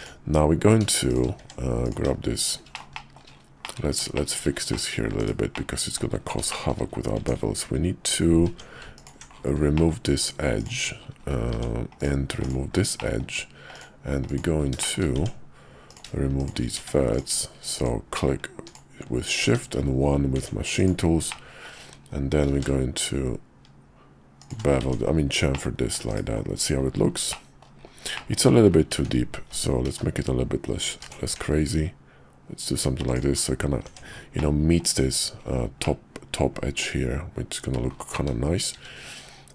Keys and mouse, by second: 1.1 shift+click, 1.4 Tab, 1.8 click, 2.8 shift+middle click, 3.0 shift+click, 3.6 click, 4.1 shift+click, 4.7 click, 5.2 /, 5.5 middle click, 6.5 shift+middle click, 6.6 shift+click, 7.2 Tab, 8.5 Tab, 8.9 alt+click, 9.7 middle click, 10.1 x, 11.5 Tab, 12.0 click, 12.3 x, 13.0 middle click, 13.7 click, 14.3 click, 14.8 shift+click, 15.2 Tab, 15.9 click, 16.4 shift+click, 16.8 1, 17.1 click, 17.8 click, 18.6 shift+click, 19.4 1, 20.4 Tab, 20.8 click, 21.3 middle click, 22.4 ctrl+b, 24.8 Tab, 25.5 middle click, 26.1 /, 27.3 click, 28.1 shift+click, 28.9 ctrl+z, 29.4 ctrl+z, 29.8 ctrl+z, 30.8 ctrl+b, 33.8 Tab, 34.4 middle click, 35.8-37.8 middle drag, 38.2 `, 38.8 `.